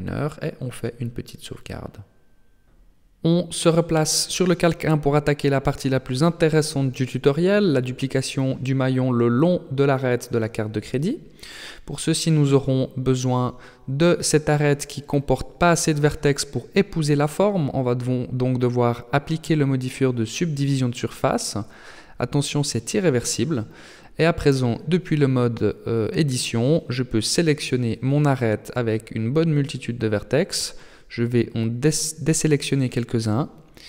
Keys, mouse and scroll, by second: 7.2 click, 8.7 right click, 9.2 middle click, 10.8 shift+middle click, 11.6 Tab, 13.2 alt+right click, 14.7 alt+shift+right click, 15.7 alt+right click, 17.6 Tab, 19.1 click, 21.2 click, 24.2 Tab, 26.3 alt+right click, 27.4 alt+shift+right click, 28.5 alt+right click, 29.7 shift+right click, 31.0 shift+right click, 31.7 shift+right click, 32.4 shift+right click, 32.8 shift+right click, 33.3 shift+right click, 33.7 shift+right click.